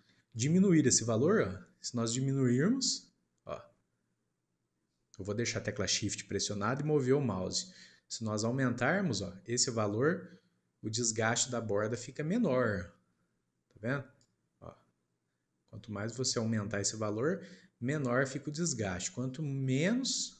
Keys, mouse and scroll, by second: 0.3-3.4 drag, 12.2 scroll up 2, 12.4 middle click, 13.1-14.1 scroll up 1, 14.1-17.2 drag.